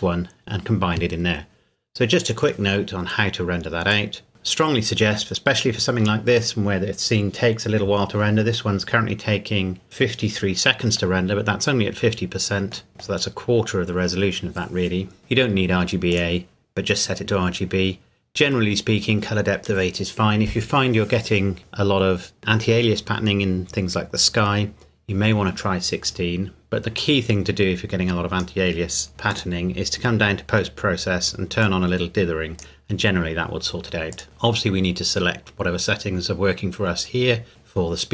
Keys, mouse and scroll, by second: 3.9 click, 4.4-5.3 scroll down 1, 12.9 middle click, 15.2-16.1 scroll down 1, 16.1 click, 27.0 click, 29.9-30.8 scroll down 1, 31.6 click, 34.2 scroll up 1.